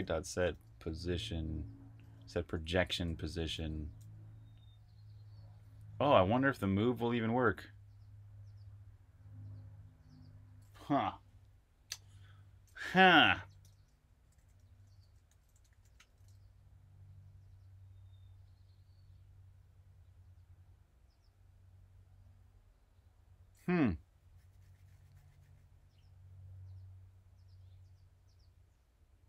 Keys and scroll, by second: 0.0-3.5 typing, 13.3-16.2 typing.